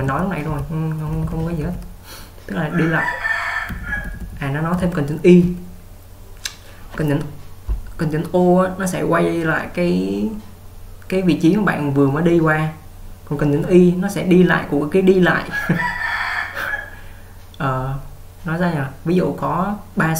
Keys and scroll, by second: 0.0-1.5 typing, 3.8-5.7 typing.